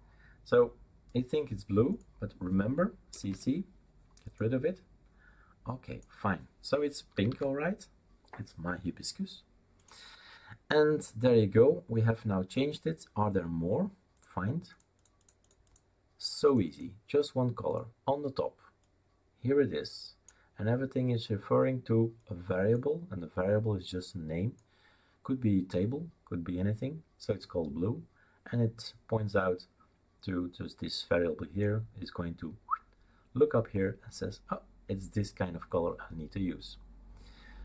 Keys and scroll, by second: 3.1 BackSpace, 3.2 BackSpace, 7.2 typing.